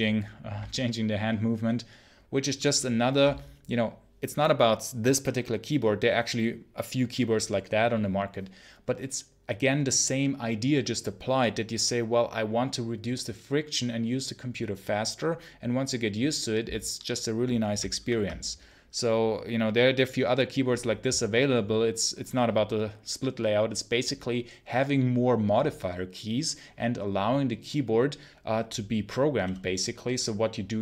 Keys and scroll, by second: 17.9 super+1.